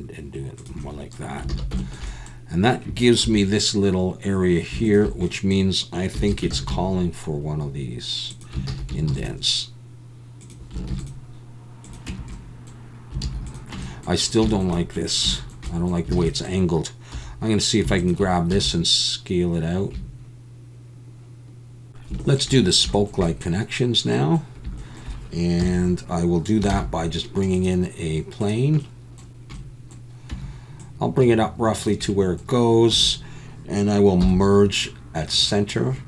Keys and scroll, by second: 1.5 alt+a, 3.2 3, 6.2 e, 6.5 alt+s, 8.7 alt+a, 9.1 ctrl+r, 10.9 ctrl+r, 12.1 Tab, 13.2 alt+a, 13.7 Tab, 16.1 alt+a, 17.1 2, 18.5 s, 25.6 KP_1, 26.7 shift+a, 30.3 Tab, 32.9 1, 34.2 m.